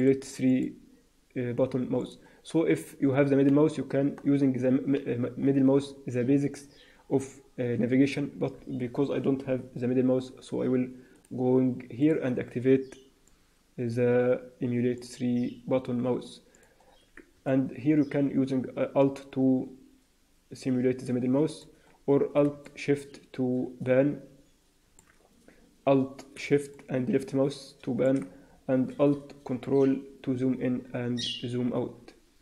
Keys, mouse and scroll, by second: 2.5-4.5 scroll down 2, 4.5-5.7 scroll down 4, 5.7-7.0 scroll down 4, 6.1-7.0 scroll up 3, 7.0 scroll down 1, 7.1-7.6 scroll down 1, 11.1 click, 17.4 middle click, 22.5 shift+middle click, 26.6 shift+middle click, 29.5 ctrl+middle click.